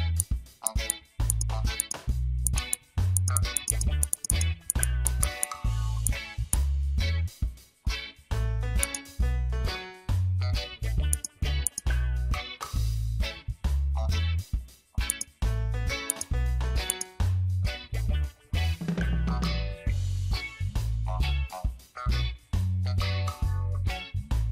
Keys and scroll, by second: 2.4 space, 4.2 space, 5.3 space.